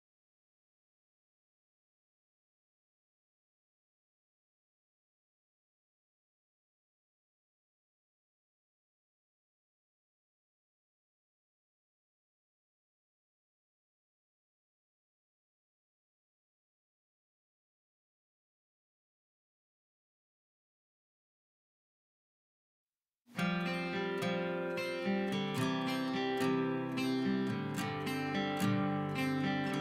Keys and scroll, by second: 1.9 b, 21.0 Escape, 21.3 Escape.